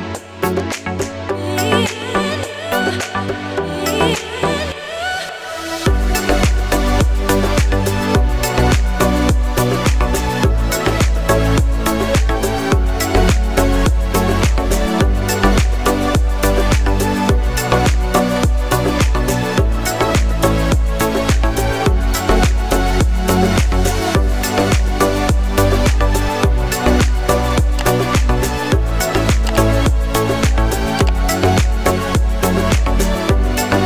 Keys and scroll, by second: 1.0 Right, 1.2 Right.